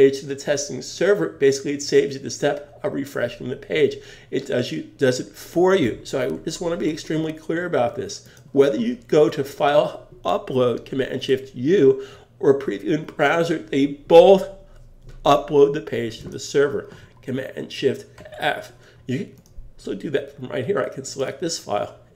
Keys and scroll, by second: 18.2 shift+super+f.